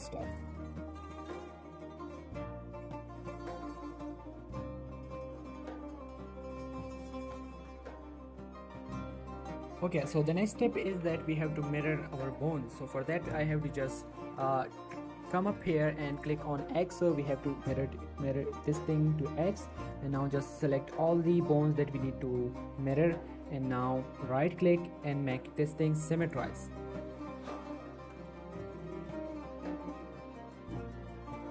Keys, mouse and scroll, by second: 0.0-4.7 typing, 0.3 click, 0.6 click, 1.2 click, 1.6 right click, 2.0 click, 2.6 right click, 2.9 click, 3.3 right click, 3.7 click, 4.1 right click, 4.6 click, 5.3 right click, 5.8 click, 6.0 r, 6.4 right click, 6.6 click, 6.8 r, 7.2 right click, 7.5 click, 7.7 r, 8.0 right click, 8.4 shift+middle click, 10.9 Tab, 16.6 click, 18.7 shift+middle click, 19.9-24.0 shift+drag, 25.2 right click, 26.2 click, 28.2 ctrl+z, 28.9 shift+middle click, 29.5 click, 31.1 click.